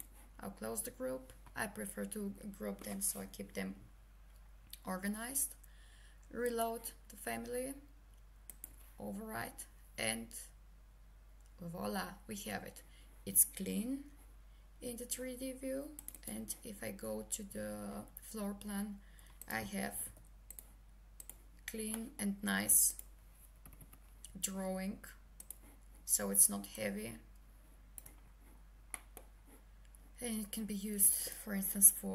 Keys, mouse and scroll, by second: 0.0 click, 6.4 click, 16.0 click, 19.9 c, 20.5 click, 22.0 middle click, 22.9 click, 23.7 Escape, 25.4 click, 26.7 shift+right click, 28.9 middle click, 31.0 click.